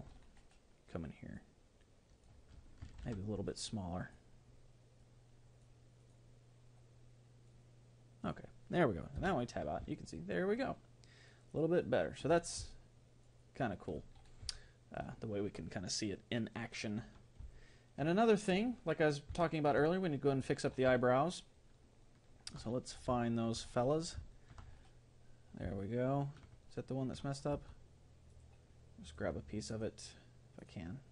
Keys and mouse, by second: 1.4-3.0 drag, 3.0 ctrl+z, 3.6-9.9 drag, 9.4 Tab, 9.9-17.2 middle drag, 17.6-27.6 middle drag, 27.6 Tab, 28.3-31.1 right drag.